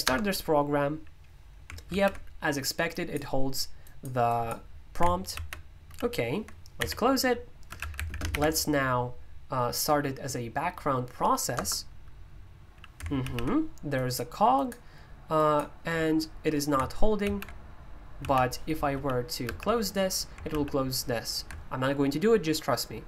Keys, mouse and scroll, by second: 0.0 Return, 2.9 click, 3.8-7.6 drag, 7.5-8.8 typing, 11.5 Return, 13.9-19.4 drag, 19.4 super+h, 20.5 super+l.